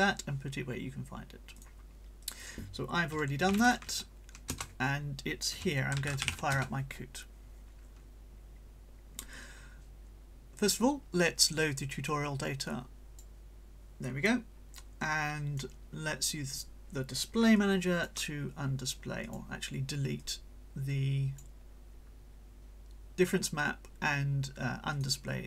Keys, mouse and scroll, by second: 1.6 click, 2.2 click, 3.5 l, 3.6 space, 3.9 alt+p, 4.5 alt+Return, 5.7-6.8 typing, 10.6 click, 11.8 click, 15.0 right click, 16.2 click, 17.6 click, 19.2 click, 20.2-21.6 drag, 24.9 click.